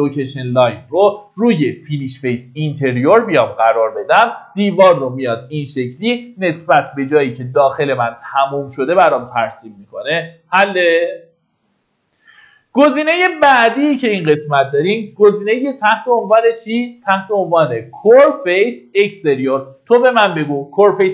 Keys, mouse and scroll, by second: 4.0 middle click, 5.5 click, 6.7 Escape, 12.9-21.1 drag.